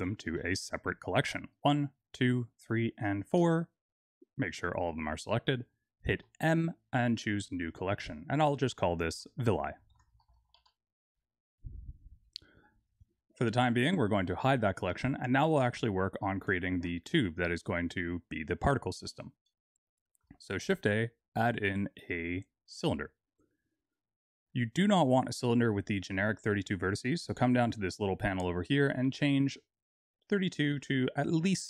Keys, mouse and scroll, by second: 0.9 click, 1.8 shift+click, 3.3 click, 6.1 m, 10.2 l, 13.2 click, 14.3 click, 20.5 shift+a, 25.3 click, 28.6 click.